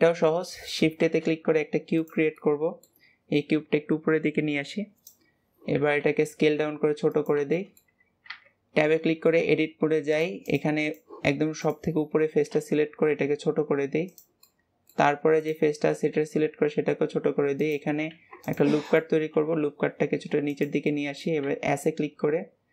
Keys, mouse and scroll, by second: 0.0-0.9 middle drag, 0.9 shift+a, 2.3-3.3 middle drag, 3.3 click, 5.2-5.9 scroll up 2, 5.9 s, 7.5-8.2 shift+middle drag, 8.2 Tab, 8.5-9.0 scroll up 2, 9.0-10.1 shift+middle drag, 10.1 click, 10.4 click, 10.8 click, 11.5 click, 11.9-12.4 scroll up 2, 12.4 s, 14.4 middle click, 15.3 click, 20.9 middle click, 21.4 s.